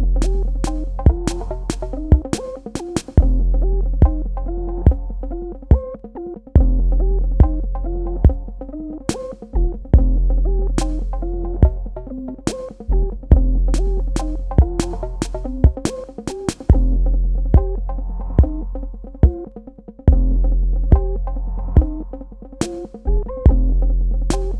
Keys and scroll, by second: 1.7 KP_Subtract, 9.8 space.